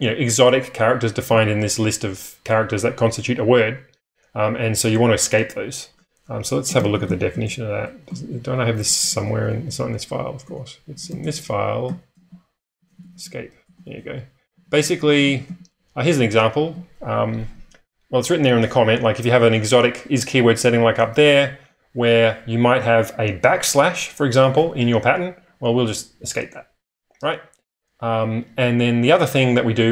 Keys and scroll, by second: 0.1 typing, 6.4-7.0 typing, 8.1 ctrl+], 9.0-15.2 typing, 9.1 Escape, 17.5 typing.